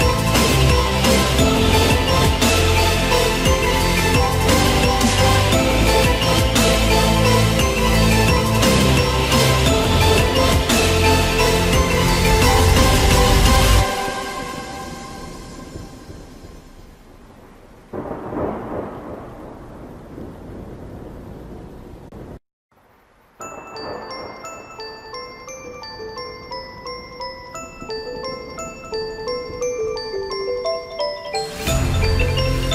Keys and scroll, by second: 0.6 ctrl+alt+z, 5.7 ctrl+alt+z.